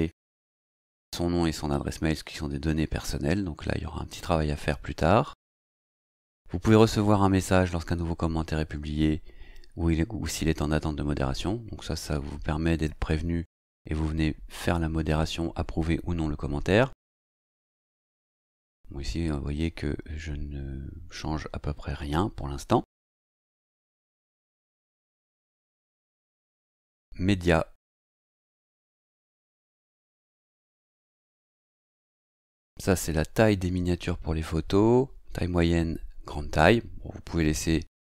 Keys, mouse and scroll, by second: 5.7-18.0 scroll down 2, 18.0-18.4 scroll down 1, 19.1-20.5 scroll down 2, 20.5-21.3 scroll down 1, 21.3-22.4 scroll down 1, 22.4-23.7 scroll down 1, 23.7-26.6 scroll down 1, 26.6 click.